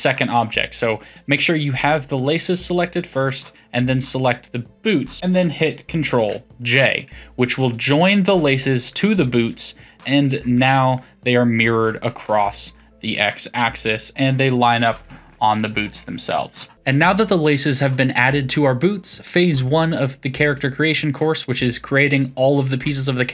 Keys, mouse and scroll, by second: 1.6 click, 3.1 shift+click, 6.2 ctrl+j, 7.5-15.3 middle drag, 15.3-16.3 scroll down 12, 16.3-16.7 shift+middle drag.